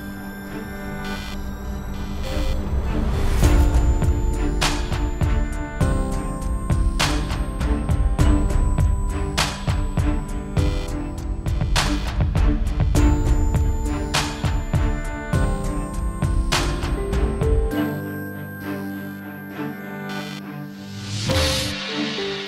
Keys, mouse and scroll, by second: 0.8 scroll down 7, 0.9 shift+middle click, 1.4 middle click, 1.8 KP_0, 1.9-2.5 scroll up 3, 2.2 shift+middle click, 2.9 shift+middle click, 3.4 scroll up 3, 3.5 scroll down 3, 4.0 shift+middle click, 11.3 click, 11.5 alt+a, 11.7 scroll down 1, 13.2 scroll up 1, 22.2 alt+a.